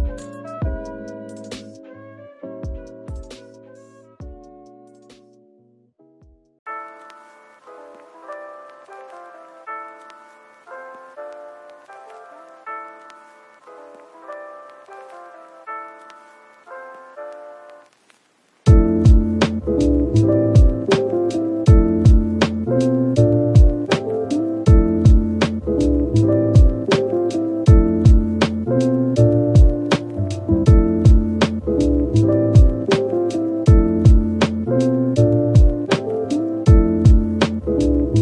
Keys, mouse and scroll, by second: 0.3 typing, 3.2 typing, 5.0 typing, 7.0 typing, 27.7-28.2 scroll down 1.